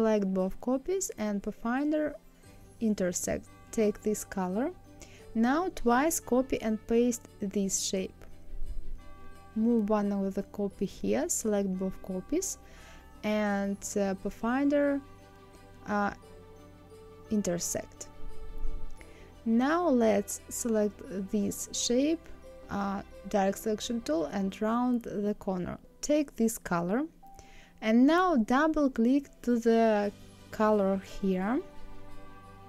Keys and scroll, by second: 5.5 ctrl+c, 6.7 ctrl+f.